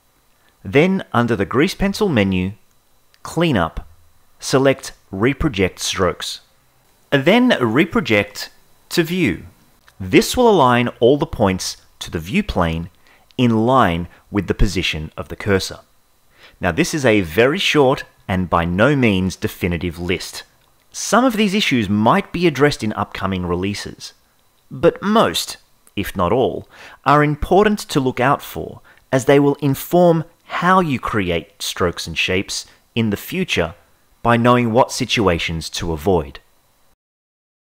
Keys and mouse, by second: 1.5-8.1 drag, 10.1-12.2 shift+middle drag, 12.7 ctrl+Tab, 14.5 KP_0, 19.0 ctrl+j, 19.1 ctrl+z, 19.9 ctrl+a, 20.2 ctrl+j, 20.8 l, 20.8 g, 20.8 z, 21.5-22.1 drag, 23.5 x, 24.0 a, 26.2 x, 26.9 a, 28.7 ctrl+j, 29.4 f, 31.5 click.